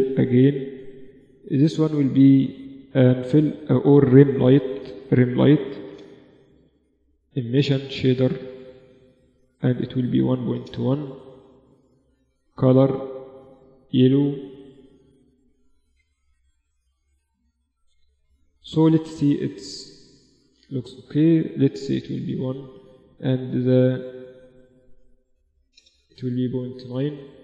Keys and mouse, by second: 1.8-4.6 drag, 6.8-10.2 drag, 11.6-13.4 drag, 15.6 KP_0, 17.1 shift+z, 18.4-21.4 drag, 21.8-25.6 drag.